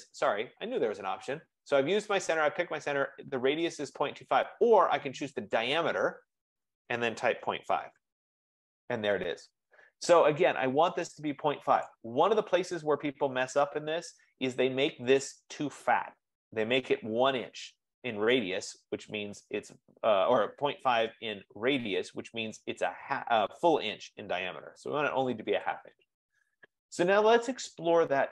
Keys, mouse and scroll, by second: 5.8 click, 7.6-9.1 typing, 11.2 click, 11.9 click, 15.4 click, 17.9-20.3 drag, 25.9-28.3 drag.